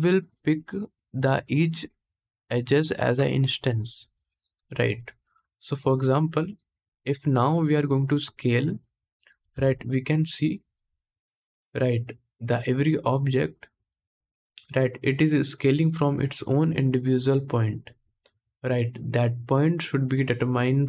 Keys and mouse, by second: 5.7-11.4 drag, 9.2 s, 11.4-12.7 middle drag, 12.7-20.8 drag.